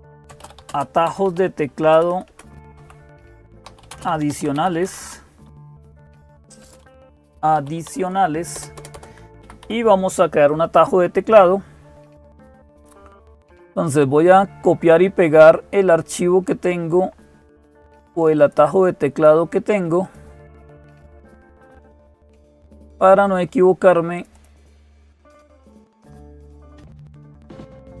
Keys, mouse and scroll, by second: 0.0-9.9 typing, 6.6 Return, 13.6 click, 18.2 click, 18.9 click, 19.8 click, 21.9-23.1 drag, 24.0 click, 24.9-26.7 drag, 26.7 scroll down 2, 26.8-28.0 drag.